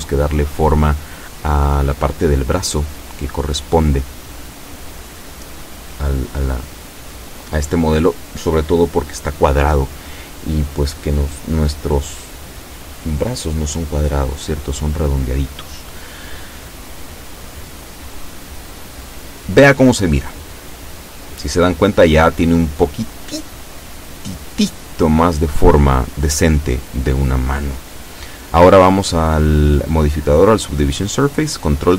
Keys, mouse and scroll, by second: 1.1 Tab, 2.1 Tab, 3.9 z, 4.6-7.2 middle drag, 7.9 click, 8.6-11.1 middle drag, 11.1-11.6 scroll up 1, 11.8 scroll down 1, 13.4 Tab, 27.1 ctrl+2, 31.5 click.